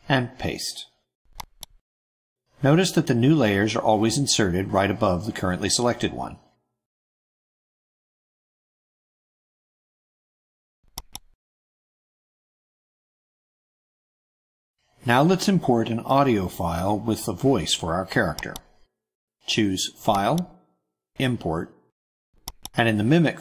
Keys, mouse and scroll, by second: 1.5 click, 3.3 click, 3.9 click, 4.6 click, 5.1 click, 5.9 click, 6.5 click, 7.0 click, 7.7 click, 8.5 click, 10.9 click, 11.9 click, 13.6 click, 20.0 click.